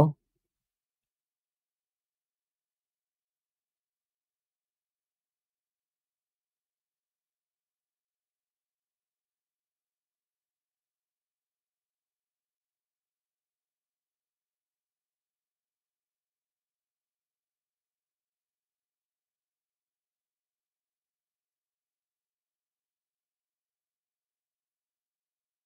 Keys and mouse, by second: 3.6-6.2 drag, 9.2-9.5 middle drag, 11.9-14.5 middle drag, 15.3-17.6 drag, 18.2-20.1 drag, 20.5-21.3 middle drag, 24.2 middle click, 25.3 shift+a.